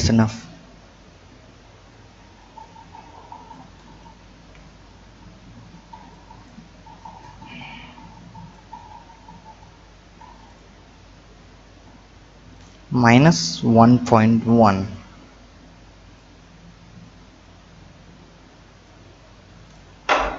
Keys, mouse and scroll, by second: 0.1-1.2 scroll down 7, 1.2-1.9 scroll down 1, 1.9-2.5 drag, 2.5-3.3 scroll down 4, 3.5-4.3 drag, 4.3 KP_7, 4.8 scroll up 4, 6.1-10.2 drag, 10.5-12.1 drag, 12.5-14.9 drag, 16.2-19.2 drag, 19.6-20.3 drag.